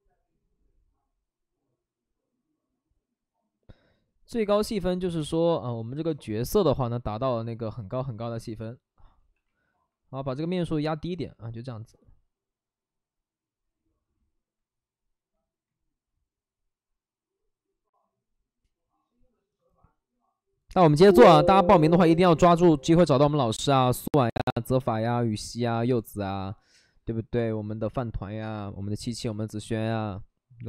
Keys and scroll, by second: 5.1 shift+f, 5.7 shift+f, 9.1 shift+f, 11.0 alt+s, 15.8 ctrl+d.